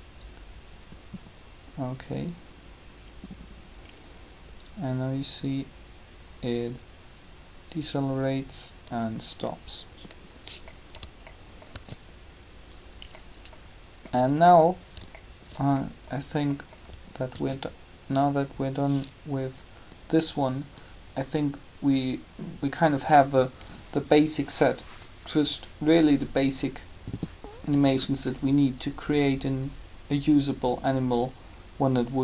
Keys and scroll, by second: 11.6 alt+a, 17.3 alt+a.